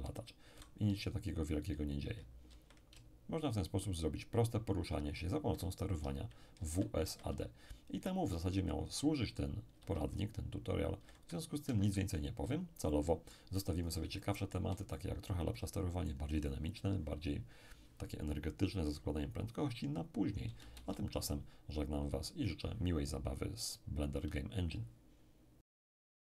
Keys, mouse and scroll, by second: 0.0-3.6 typing, 5.7-8.1 typing, 9.7-10.8 typing, 11.7 Escape, 12.5-12.9 scroll down 2, 12.9 middle click, 13.5-14.1 scroll up 3, 14.1-17.0 shift+middle drag, 20.6 shift+space.